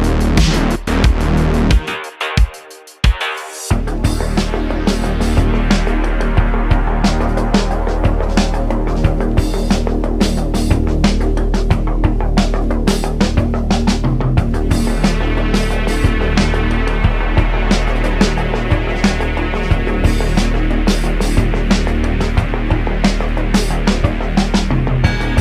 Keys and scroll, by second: 0.6 ., 1.2 s, 3.4 1, 6.2 `, 11.3 t, 17.9 alt+x, 19.3 super+z, 20.7 alt+x, 22.5 h, 23.0 super+z.